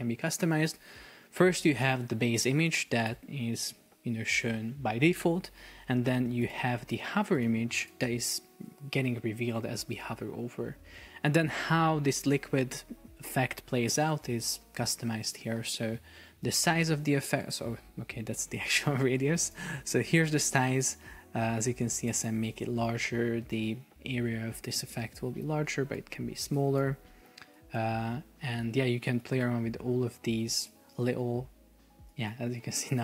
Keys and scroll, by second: 3.7 super+p, 5.8 Escape, 9.1 super+p, 10.8 Escape.